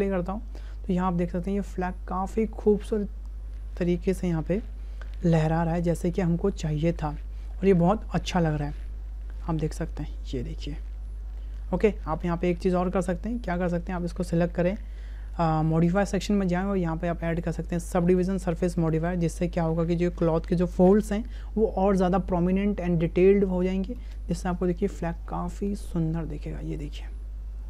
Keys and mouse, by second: 12.4 space, 16.8-18.1 right drag, 18.9-20.0 right drag, 24.0 space.